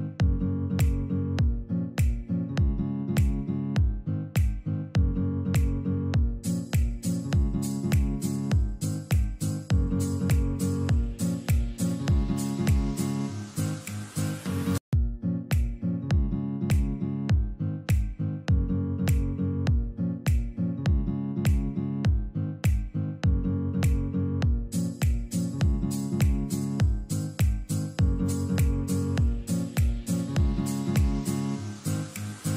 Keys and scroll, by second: 0.9 alt+c, 2.5 Escape, 12.0 alt+c, 13.1 Escape, 14.1 Escape, 18.8 alt+c, 20.4 alt+c, 29.7 alt+c.